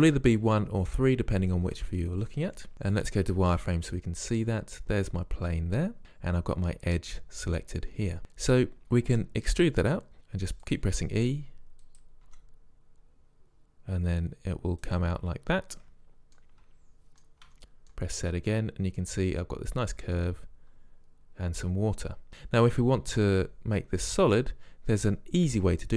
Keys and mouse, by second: 0.6 KP_3, 1.7 KP_1, 3.1 z, 9.6 e, 10.1 e, 11.0 e, 12.4 e, 16.5-17.6 middle drag, 17.6 z, 25.0-25.9 drag.